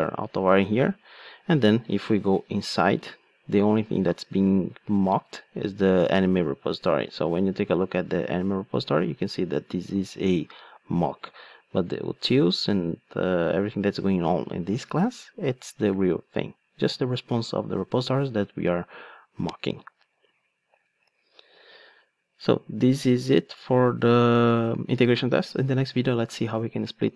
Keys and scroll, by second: 2.1 F8, 20.3 alt+super+r.